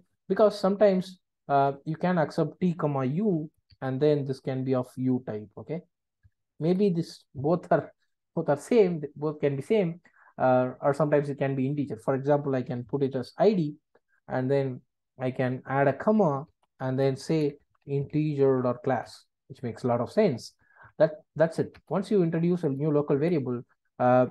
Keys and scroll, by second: 0.9 super+b, 6.2 Delete, 19.1 Return, 22.7 alt+Return.